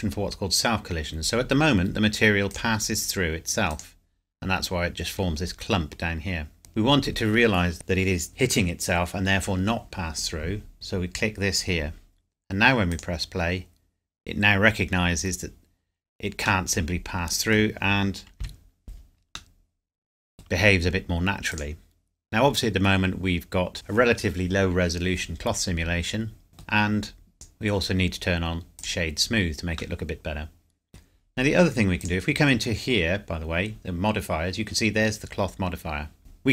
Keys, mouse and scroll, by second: 2.5 click, 6.6 click, 10.7 click, 13.0 click, 16.7 middle click, 18.4 KP_Decimal, 19.5 middle click, 21.5 click, 26.5 middle click, 27.3 right click, 28.7 click, 29.9 middle click, 32.0 click, 36.2 scroll down 1.